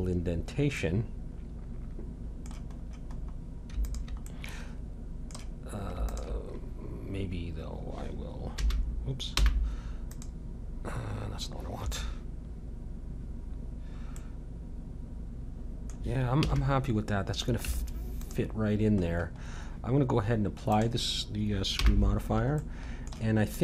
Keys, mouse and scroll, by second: 1.3-2.6 middle drag, 3.2-3.8 scroll up 1, 3.8-5.6 drag, 5.6-7.7 middle drag, 7.7 click, 8.5 m, 9.3 n, 10.1-12.2 drag, 14.2 middle click, 16.4 a, 17.6 Tab, 20.7-23.6 drag, 21.8 n.